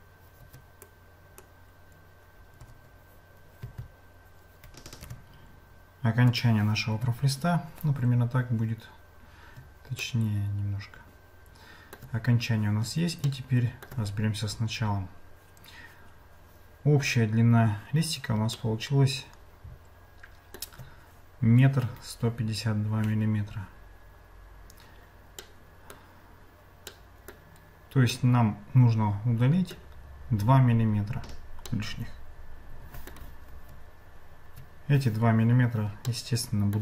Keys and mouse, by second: 0.9 click, 2.6 g, 6.9 Tab, 10.0-12.0 shift+middle drag, 13.3 shift+middle click, 18.6-20.6 shift+middle drag, 25.5 middle click, 26.9 middle click, 28.1-29.9 middle drag, 31.7-33.1 middle drag, 36.1 shift+middle click.